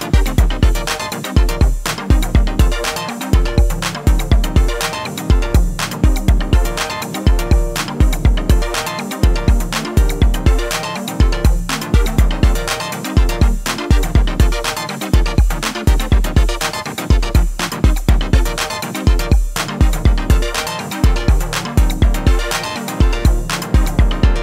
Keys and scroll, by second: 16.7 ctrl+r, 22.2 ctrl+r.